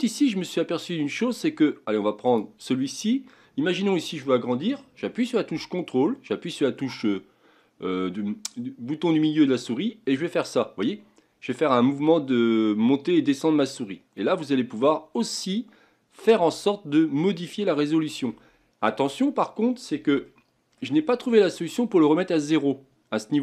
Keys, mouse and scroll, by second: 2.2 click, 9.8-12.9 ctrl+middle drag, 20.2-21.4 ctrl+middle drag, 21.4-22.3 scroll up 3, 22.3-23.2 scroll up 1.